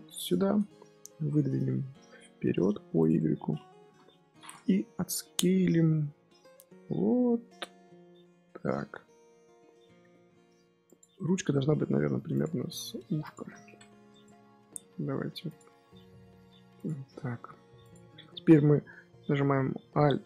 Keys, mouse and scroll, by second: 0.7-1.9 middle drag, 1.9 g, 3.1 middle click, 3.7 KP_1, 4.7 Tab, 5.0 s, 11.1 Tab, 11.5 g, 12.5 Tab, 12.8 s, 13.3 g, 14.3 Tab, 14.7 g, 15.6 Tab, 15.8 s, 16.8 Tab, 17.2 g.